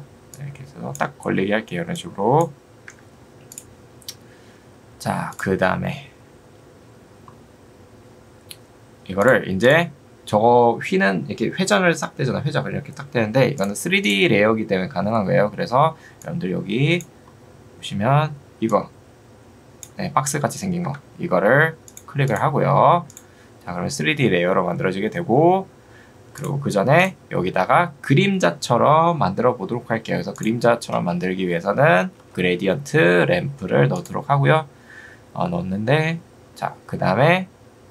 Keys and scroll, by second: 2.9 Escape, 20.9 Escape, 31.7-32.6 typing.